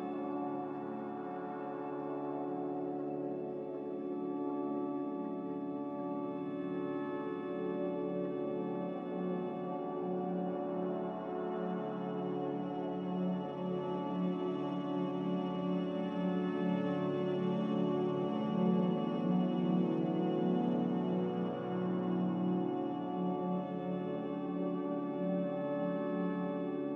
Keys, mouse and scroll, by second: 6.6 Delete, 6.9 s, 7.9-11.3 typing, 13.2-15.3 typing, 20.0 m.